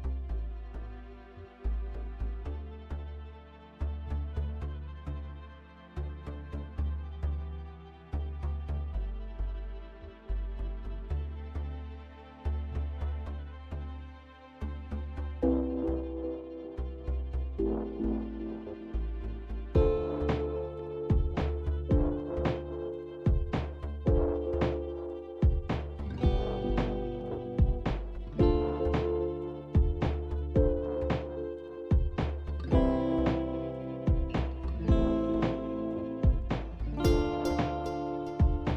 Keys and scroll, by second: 0.0-2.6 typing, 4.1-13.6 typing, 24.5 alt+Tab, 25.7 alt+Tab.